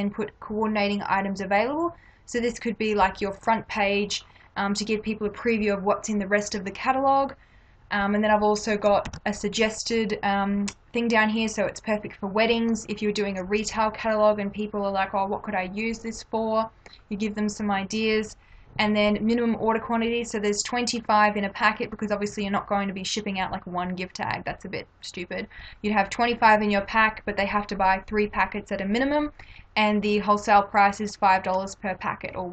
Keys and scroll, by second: 9.0 ctrl+=.